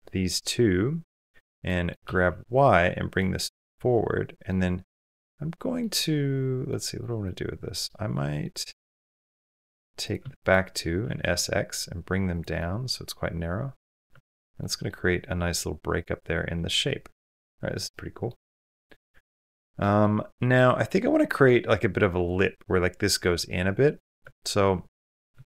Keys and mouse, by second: 1.5 middle click, 2.0 g, 3.1-4.3 middle drag, 4.8 middle click, 6.5 middle click, 7.0 middle click, 8.2-9.6 middle drag, 10.8 s, 12.4-13.8 middle drag, 13.9 Tab, 14.4 middle drag, 15.3-17.0 middle drag, 17.2 middle click, 17.7-18.1 middle drag, 18.2-18.7 middle drag, 19.0 shift+middle drag, 19.3 middle drag, 19.8 middle click, 21.0 middle click, 23.8-24.5 middle drag, 24.0 Tab, 25.3 shift+middle click.